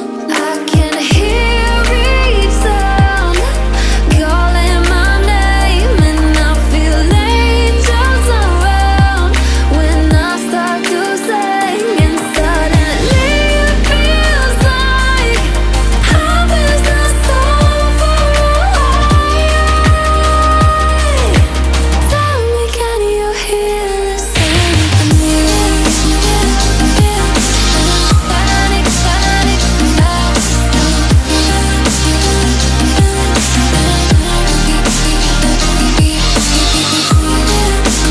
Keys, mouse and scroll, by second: 1.1-3.6 drag, 4.1 alt+scroll down 1, 5.4-5.8 alt+scroll up 1, 8.6 alt+scroll up 1, 9.3 click, 9.8 shift+click, 12.4 click, 14.2-15.0 alt+scroll down 2, 15.0 click, 15.3-15.9 alt+scroll up 2, 15.9-16.3 alt+scroll down 2, 16.3-17.7 alt+scroll up 2, 18.9-19.3 alt+scroll up 1, 20.7 F7, 21.6 click, 21.9-22.3 alt+scroll up 2, 22.3-22.7 alt+scroll down 1, 22.7-23.0 alt+scroll up 1, 23.4 click, 24.2 alt+scroll up 1, 25.1-26.8 drag, 27.1-27.4 alt+scroll up 1, 28.2 alt+scroll down 1, 29.0 click, 31.6 click, 32.4 alt+scroll up 1, 33.0-34.5 alt+shift+drag, 34.5 ctrl+shift+], 35.5-38.1 drag.